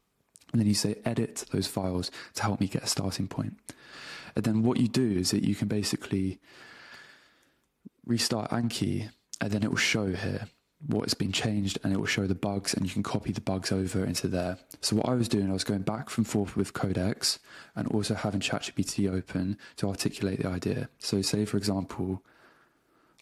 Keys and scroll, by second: 7.5 super+w, 14.5 super+Tab, 18.1 super+space, 18.6 Return.